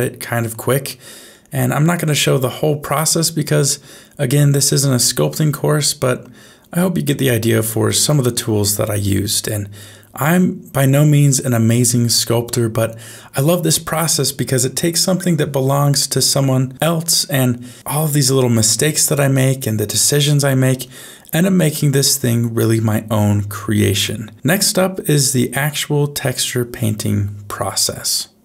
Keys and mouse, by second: 3.8 ctrl+middle click, 4.8 shift+middle click, 6.8 middle click, 8.3-10.5 middle drag, 10.8 ctrl+middle click, 11.3 ctrl+middle click, 11.9 shift+middle click, 12.7 middle click, 13.9 shift+middle click, 14.5-15.8 ctrl+middle drag, 16.1 shift+middle click, 16.5-18.2 middle drag, 18.3 shift+middle click, 19.2 middle click, 24.4 ctrl+middle click, 25.1 shift+middle click, 25.6-28.4 middle drag.